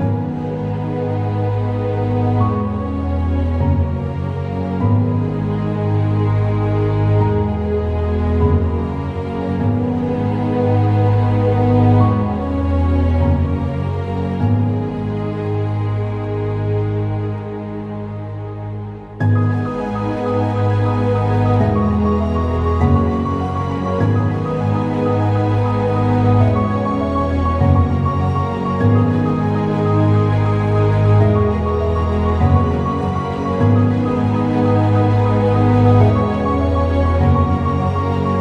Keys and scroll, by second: 11.4 alt+Return, 35.3 ctrl+t, 37.6 Return.